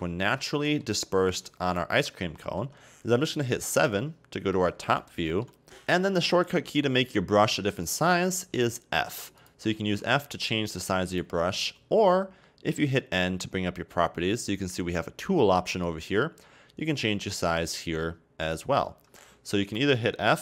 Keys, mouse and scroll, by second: 0.3 scroll down 1, 0.4-1.4 middle drag, 1.4-2.5 drag, 2.5 ctrl+z, 3.8 KP_7, 5.1-5.6 shift+middle drag, 6.6 f, 8.5 f, 9.8 f, 13.2 n, 15.8 click, 18.5-19.8 drag.